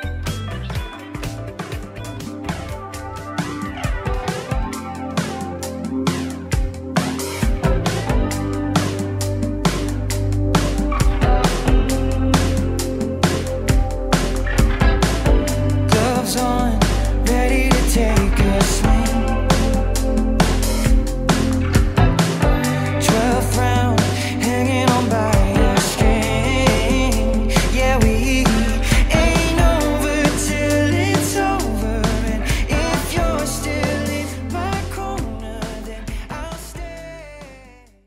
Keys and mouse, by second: 1.1 click, 1.5 click, 2.2 alt+middle click, 2.5 click, 3.1 alt+click, 3.3 alt+right click, 3.8 click, 4.1 alt+right click, 4.2 alt+click, 4.9 click, 5.3 click, 6.1 click, 7.0 alt+right click, 7.5 alt+click, 7.8 click, 8.7 alt+click, 9.4 alt+right click, 9.6 click, 10.2 click, 10.3 alt+right click, 10.9 alt+click, 11.5 click, 15.7 click, 17.0 click, 17.2 click, 17.5 click, 17.8 click, 18.0 click, 18.5 click, 19.4 click, 20.0 click, 22.4 click, 23.2 click, 24.9-25.8 typing, 28.2 click, 28.5 click, 29.1 click, 29.3 click, 29.7 click, 30.1 click, 30.2 click, 30.8 ctrl+click, 31.3 click, 31.8 click, 32.8 click, 33.2 click, 33.7 click.